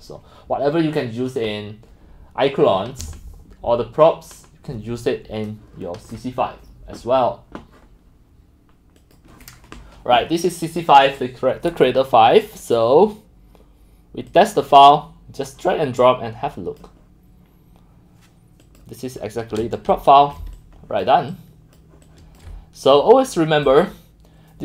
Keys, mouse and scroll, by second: 9.0 click, 9.7 click, 10.8 click, 14.0 click, 14.4-14.8 drag, 15.5 click, 19.2 click, 19.4 middle click, 19.8 middle click, 20.2 x, 20.5 click, 21.3-22.1 scroll, 22.1 c, 22.5 c, 22.7 click, 23.8-24.6 drag.